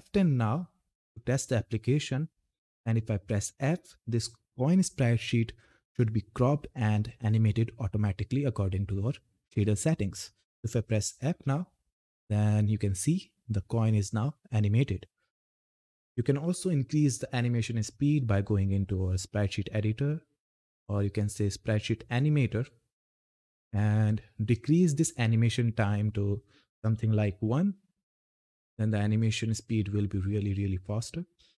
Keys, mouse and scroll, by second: 0.9 ctrl+F10, 2.2 Down, 11.0 f, 18.1-22.9 drag, 23.3 click, 28.4 click.